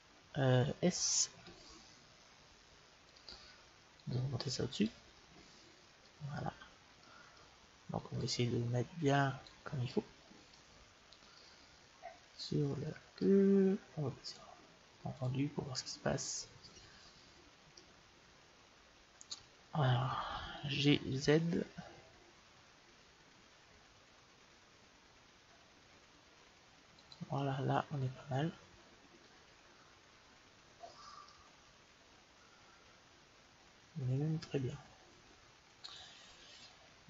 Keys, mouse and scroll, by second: 1.2 s, 3.8-5.7 drag, 5.6-8.1 middle drag, 8.1-9.9 drag, 9.9-13.2 middle drag, 14.1-16.1 drag, 17.7-19.2 middle drag, 20.4 g, 27.4-29.2 middle drag, 30.6-31.3 scroll up 1, 31.3-33.1 middle drag.